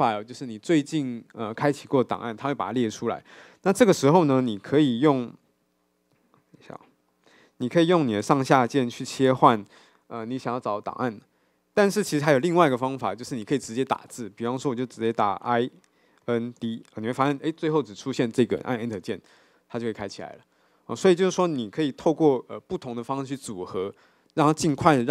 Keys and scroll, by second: 7.3 super+e.